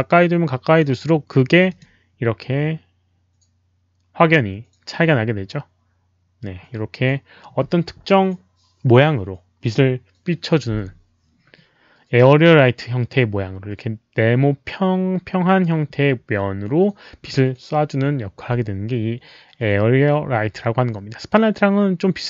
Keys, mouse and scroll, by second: 0.7 z, 1.6 click.